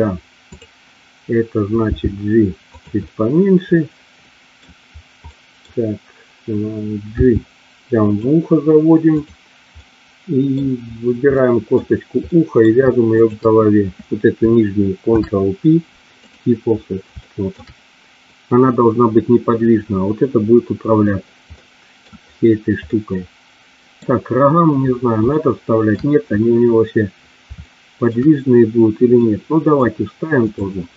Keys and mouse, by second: 0.5 click, 2.7 click, 3.2-4.7 middle drag, 5.2 middle click, 7.0 g, 9.2 click, 9.8 middle click, 11.4 middle click, 12.2 middle click, 15.1 ctrl+p, 17.2 shift+middle click, 21.5 middle click, 22.7-24.0 middle drag, 25.4 shift+middle click, 27.5 shift+middle click, 29.1 middle click, 30.4 click.